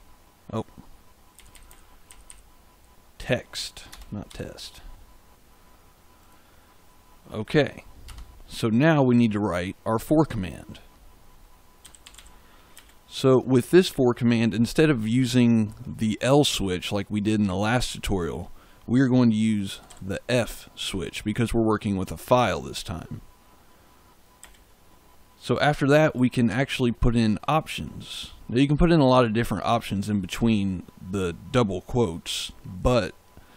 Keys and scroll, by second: 1.3 Left, 3.8 BackSpace, 4.2 x, 8.0 Return, 11.5-12.7 typing, 19.4-20.3 typing, 24.3 space, 26.4 shift+'.